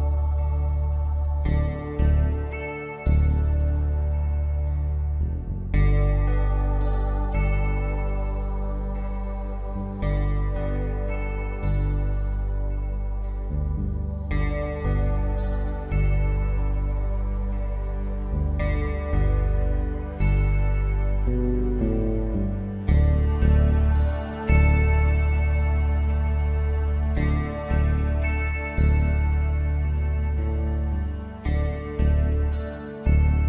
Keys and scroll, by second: 7.6 ctrl+d.